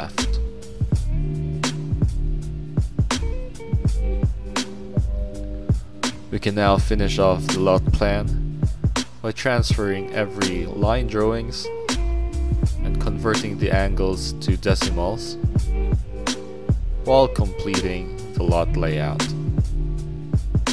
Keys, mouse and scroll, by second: 0.2 click, 0.8 middle click, 1.8-2.2 scroll up 2, 2.0 middle click, 3.3 middle click, 3.3 scroll down 2, 3.6 middle click, 4.2 click, 5.5 click, 6.5 click, 7.5 click, 8.0 middle click, 8.2 middle click, 8.6 click, 9.1 click, 10.7 click, 11.7 click, 12.8 click, 13.6 click, 14.5 click, 18.5 middle click, 19.3 click, 19.9-20.7 drag.